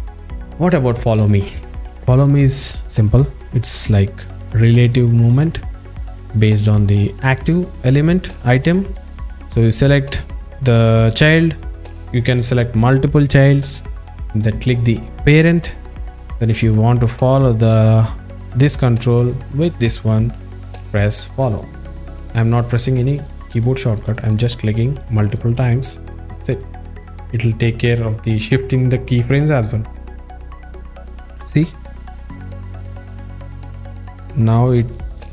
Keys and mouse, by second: 3.3-4.3 drag, 4.6 alt+shift+middle click, 5.5 drag, 16.0 click, 16.5 click, 21.4 click, 21.8 click, 23.2 click, 24.7 click, 26.9 drag, 30.6-35.3 drag.